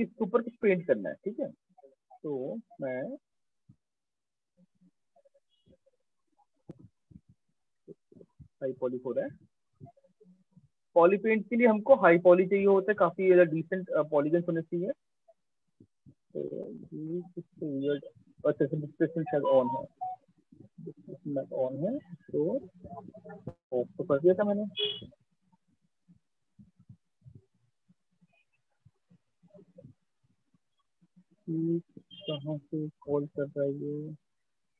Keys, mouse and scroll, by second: 0.6 click, 1.6 click, 2.2 click, 3.3 click, 11.7 click, 12.3 click, 12.9 click, 13.7 click, 16.0 alt+click, 16.8 right click, 18.7 click, 20.3 click, 28.7 click, 31.9 click, 33.5 click.